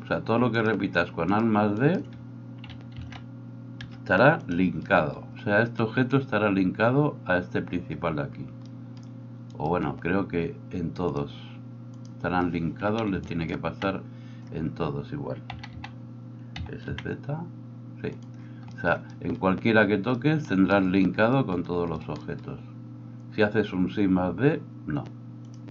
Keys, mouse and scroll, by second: 1.3 shift+middle click, 1.3 shift+right click, 3.0 alt+d, 4.5-9.5 middle drag, 9.5 right click, 9.7-11.1 middle drag, 11.1-18.2 drag, 15.5 a, 15.7 a, 16.5 s, 18.2-25.7 middle drag.